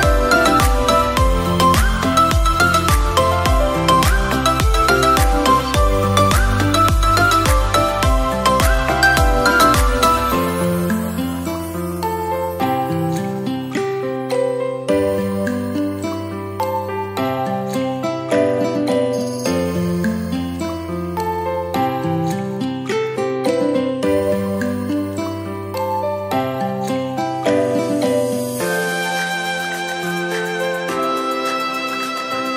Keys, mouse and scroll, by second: 1.0 scroll up 3, 1.6-2.2 shift+middle drag, 2.2-2.6 drag, 4.8 click, 6.4-7.8 middle drag, 7.8 click, 8.6-9.4 middle drag, 9.4 click, 10.4 s, 11.6 click, 13.2 middle click, 13.8 KP_1, 15.8 Tab, 16.5 a, 17.5 shift+d, 18.5 r, 22.3 drag, 26.5 Tab, 26.7-27.1 drag, 27.1 scroll down 3, 27.5-28.3 middle drag, 28.3 scroll down 1, 28.4-30.8 middle drag, 30.8 click, 31.6-32.5 middle drag.